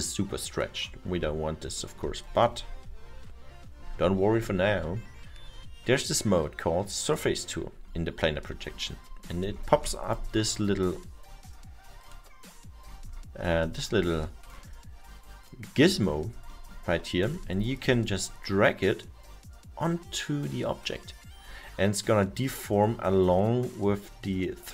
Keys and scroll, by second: 17.3 alt+7.